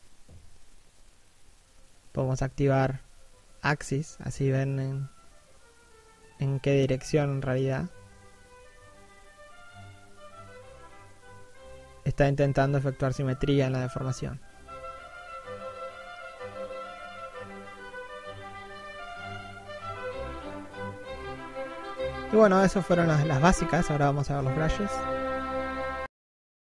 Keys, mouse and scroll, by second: 3.9 middle click, 5.2 click, 6.3 middle click, 7.3 middle click, 9.6 middle click, 10.3 click, 11.6 middle click, 16.0 1.